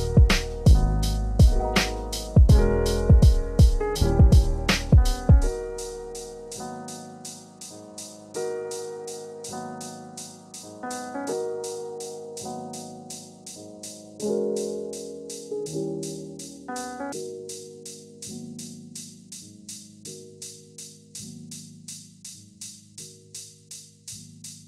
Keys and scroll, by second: 1.9 ctrl+a, 11.8 ctrl+z.